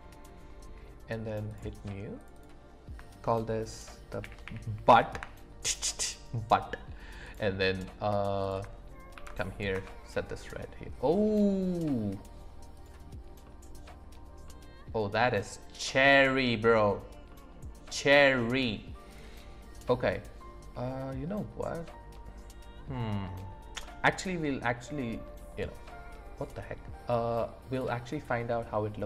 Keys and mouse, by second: 1.5 click, 2.2 click, 2.4-5.1 drag, 7.2 click, 12.8 click, 13.4 middle click, 14.5-16.9 middle drag, 17.3-18.6 middle drag, 19.8 middle click.